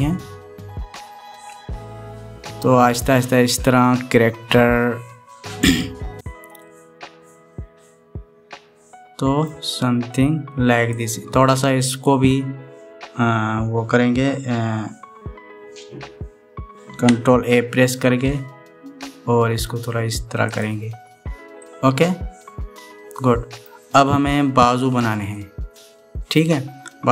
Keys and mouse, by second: 7.4-10.3 middle drag, 11.9 click, 18.9 ctrl+a, 22.4-24.4 drag, 22.4-24.4 middle drag, 22.4-24.4 right drag, 26.1 click, 26.1-27.1 middle drag, 26.1 right click.